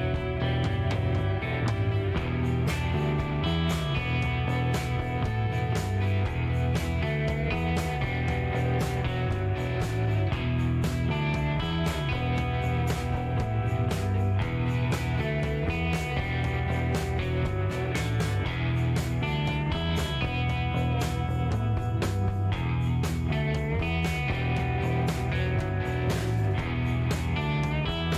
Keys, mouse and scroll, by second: 2.4 click, 3.0 middle click, 3.4 scroll up 2, 4.9 click, 6.2 click, 6.7 middle click, 8.5 click, 9.3 click, 9.7 middle click, 11.5 click, 12.2 click, 12.5 middle click, 14.1 click, 15.0 click, 15.5 middle click, 17.5 click, 18.1 click, 18.4 middle click, 20.0 click, 20.7 click, 21.6 right click, 22.0 scroll down 1, 22.3 click, 22.3 middle click, 22.8 scroll down 1, 22.8 middle click, 23.2 scroll up 1, 24.0 click, 24.6 click, 25.6 click, 26.8 KP_8, 27.1 KP_Enter, 28.1 scroll down 2.